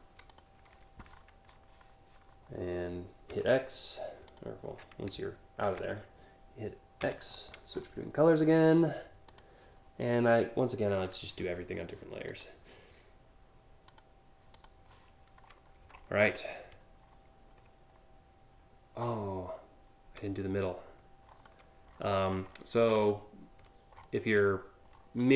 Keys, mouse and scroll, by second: 3.0 x, 3.9 click, 5.3 ctrl+z, 6.6 x, 8.9 click, 10.6 click, 11.9 click, 13.5 click, 14.2 click, 15.1-15.7 scroll down 2, 16.7 alt+scroll up 1, 19.9-20.2 alt+scroll up 1, 20.4-21.1 alt+scroll up 2, 21.5-22.6 scroll up 4, 22.6 alt+scroll down 3, 23.6-24.2 scroll down 5, 24.6 alt+scroll up 1, 25.2 scroll up 1.